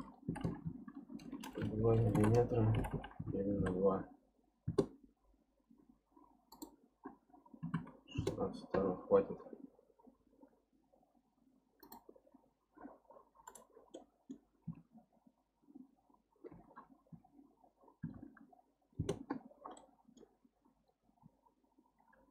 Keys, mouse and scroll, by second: 0.4 m, 1.8 BackSpace, 2.9 m, 6.5-9.5 drag, 11.8-13.5 drag, 13.9-14.7 middle drag, 14.7 Tab, 16.5 r, 19.8-21.2 middle drag, 21.2 KP_3.